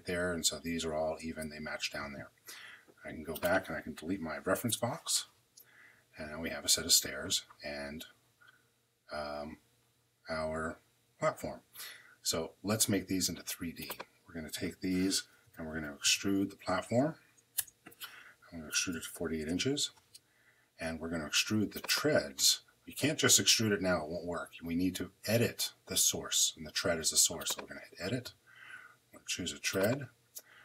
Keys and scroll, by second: 4.5 BackSpace, 15.0-16.3 typing, 17.4 Return, 18.3-19.2 typing.